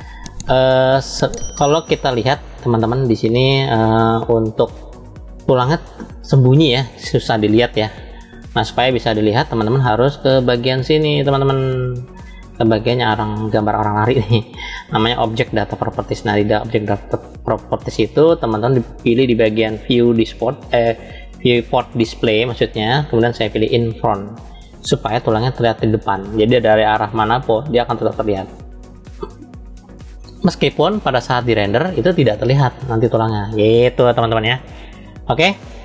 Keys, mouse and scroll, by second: 2.2 click, 4.1-5.9 middle drag, 6.8-9.2 middle drag, 10.6-12.5 drag, 15.6 click, 20.0 click, 24.7 click, 25.9-32.5 middle drag.